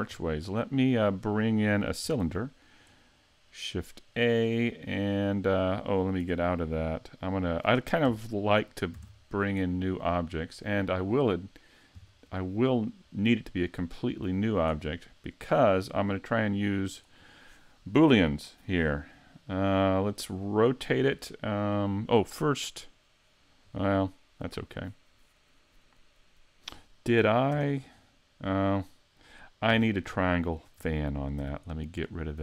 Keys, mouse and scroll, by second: 0.1 middle click, 2.2 shift+a, 6.2 Tab, 8.9 shift+a, 16.4 click, 27.5 Tab, 27.9 scroll up 5, 28.4-29.7 scroll down 4, 29.7 Tab, 30.1 shift+middle click, 31.4 x.